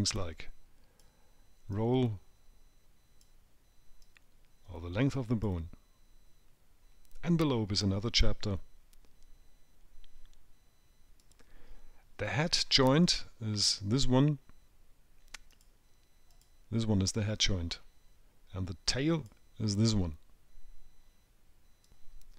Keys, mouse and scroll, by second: 0.5 click, 2.1 click, 4.4 click, 13.5 click, 15.9 click, 16.7 click, 17.8-18.8 scroll up 5, 19.6 click.